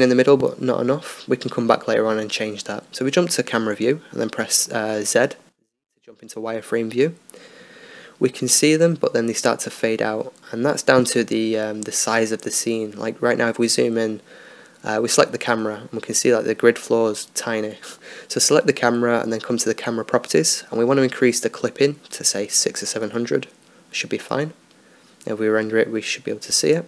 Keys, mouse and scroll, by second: 2.1-3.5 drag, 3.0 KP_0, 3.1 KP_0, 4.3 z, 6.1-7.7 drag, 10.7-14.1 middle drag, 14.1-15.6 right drag, 15.6-16.8 middle drag, 16.8 z, 17.2 middle click, 19.3-20.8 drag, 21.9-23.4 drag, 25.1-26.8 drag.